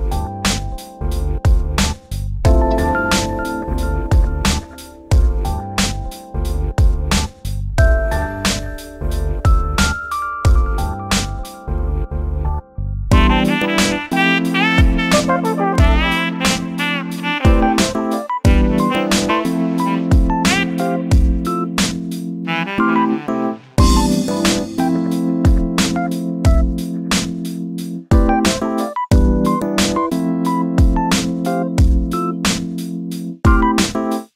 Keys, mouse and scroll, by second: 0.2 3, 0.3 click, 0.7 shift+click, 0.9 middle click, 1.2-2.2 scroll up 1, 2.2 e, 4.1 click, 4.5-4.9 drag, 4.9 scroll down 3, 5.2 shift+middle click, 5.5-6.1 middle drag, 6.1 scroll down 1, 7.1 click, 7.3-10.3 drag, 11.0 click, 12.6-14.1 drag, 14.6 click, 15.1 middle click, 15.5 z, 16.4 Tab, 16.6-17.0 scroll down 4, 17.0 shift+middle click, 17.5-17.8 scroll up 6, 17.8 middle click, 18.7-19.3 scroll up 6, 19.3 Tab, 19.6 click, 20.0 click, 20.1 Tab, 20.5 click, 20.9 shift+middle click, 21.4 shift+click, 22.6 click, 22.9 click, 23.7 click, 24.2-24.8 drag, 25.0 click, 25.9-26.5 scroll down 10, 26.2 Tab, 26.5 shift+middle drag, 26.9 shift+middle click, 27.5 click, 28.3-30.5 drag, 31.5 click, 31.9-32.3 drag, 32.7 click, 33.5 click.